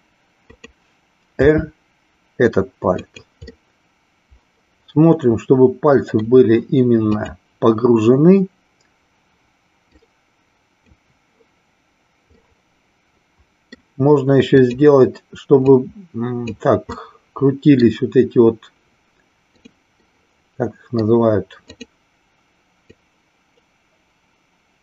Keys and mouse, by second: 1.5 r, 3.6-6.2 middle drag, 7.1 click, 9.9-11.0 drag, 12.4-13.7 middle drag, 15.6 click, 16.9 middle click, 19.5 click, 20.1-21.2 middle drag, 21.7 click, 22.8-24.8 drag.